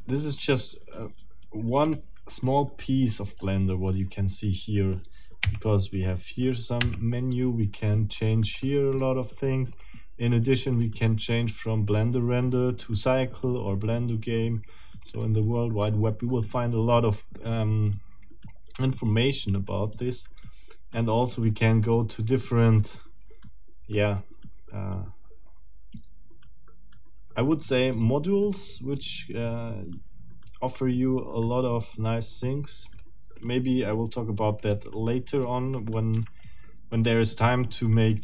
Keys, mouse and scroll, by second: 3.7 middle click, 5.4 n, 6.8 n, 7.8 click, 8.2 click, 8.6 click, 8.9 click, 9.7 click, 10.7 click, 15.0 click, 16.3-19.3 middle drag, 21.2 click, 32.9 click, 34.6 middle click, 36.1 Escape, 36.6-37.6 middle drag, 37.9-38.2 middle drag.